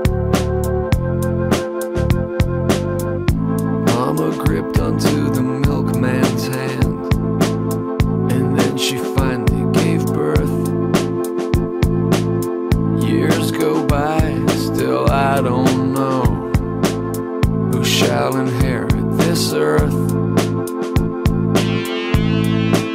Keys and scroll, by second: 1.1 scroll, 12.8-14.9 typing, 17.9 typing.